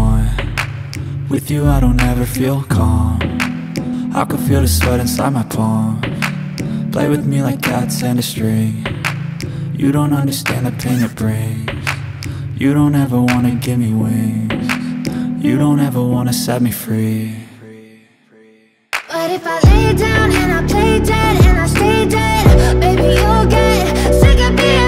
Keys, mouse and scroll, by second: 2.1 click, 3.0-6.8 drag, 6.8 ctrl+z, 7.6 click, 8.5 ctrl+z, 9.4-10.6 drag, 13.1-18.1 drag, 21.5-23.7 drag.